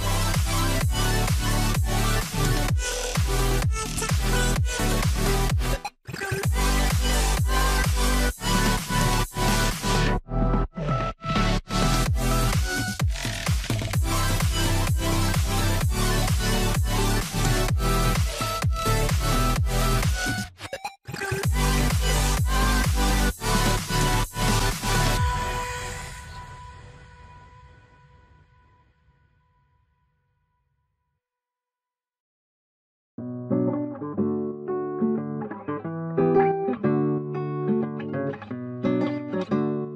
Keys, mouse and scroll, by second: 2.8 scroll up 1, 7.6-7.9 scroll up 1, 8.2 shift+click, 9.3 ctrl+click, 11.0 ctrl+click, 12.5 ctrl+click, 13.4 ctrl+click, 14.4 ctrl+click, 15.1 ctrl+click, 17.1 ctrl+right click, 28.5 double click, 39.8 double click.